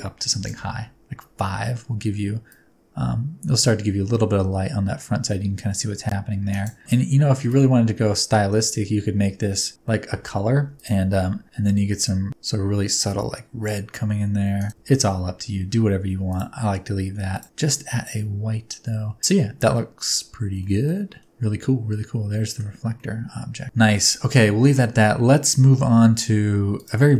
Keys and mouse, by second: 9.8 middle drag, 10.8 click, 10.8 r, 10.8 x, 11.0 g, 14.6 click, 14.8 ctrl+z, 16.3 click, 19.2 middle click, 20.7 middle click, 21.3-22.8 middle drag, 23.0-23.6 middle drag, 23.6 KP_0, 26.7 click, 27.1 middle click.